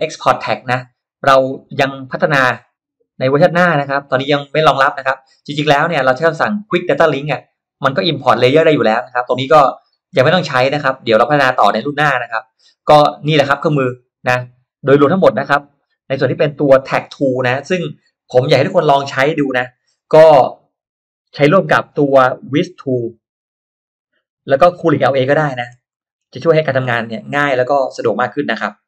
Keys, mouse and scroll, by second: 7.0-7.5 drag, 13.5-14.6 drag, 15.0-15.4 scroll up 1, 15.4 middle click, 15.6 scroll down 1, 23.9 click, 25.6-25.9 scroll down 1, 26.0 middle click, 26.4 scroll up 1, 27.2 scroll up 1.